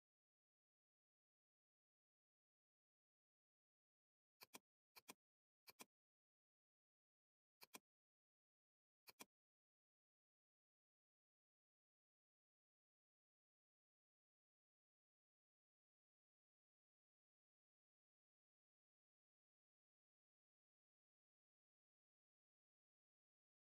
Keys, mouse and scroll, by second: 2.8 alt+click, 4.5 alt+click, 7.7-10.8 drag, 10.8-11.4 scroll down 1, 11.9-13.2 scroll up 1, 13.4 scroll down 1, 14.0 ctrl+-.